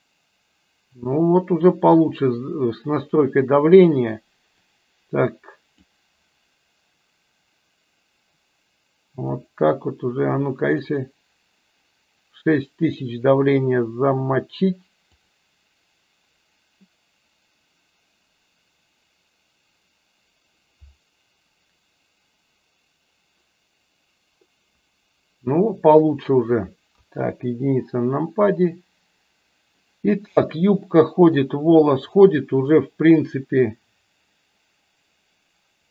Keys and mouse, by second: 4.7-6.0 drag, 9.5-12.7 drag, 15.9 click, 27.0 KP_1, 30.5-31.5 shift+middle drag, 33.5 click.